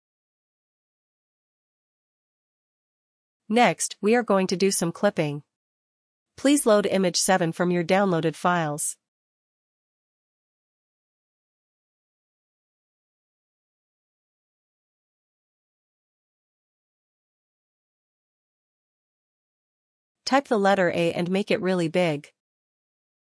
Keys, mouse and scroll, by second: 1.8 click, 4.7 click, 6.7 click, 9.6 click, 10.8 click, 11.0 click, 21.1 click.